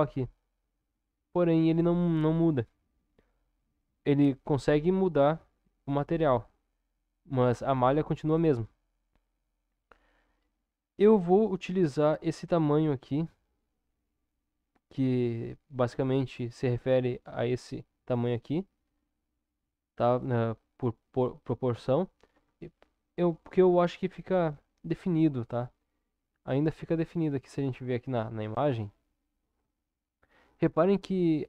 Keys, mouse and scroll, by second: 22.3 Tab, 27.1 click, 31.2-31.4 drag.